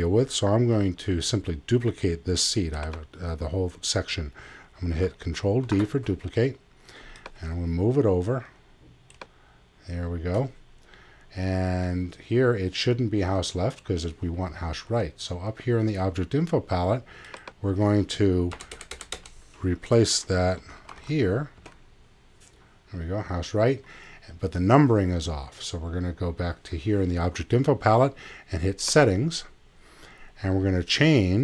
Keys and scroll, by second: 18.5 BackSpace, 20.3-21.5 typing, 21.6 Return.